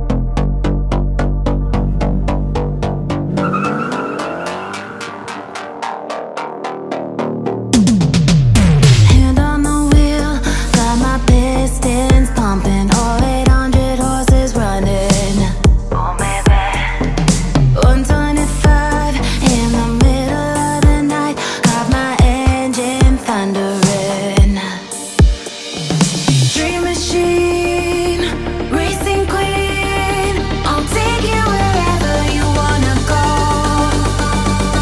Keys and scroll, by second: 5.6 ctrl+-, 7.2 ctrl+g, 31.2 ctrl+t.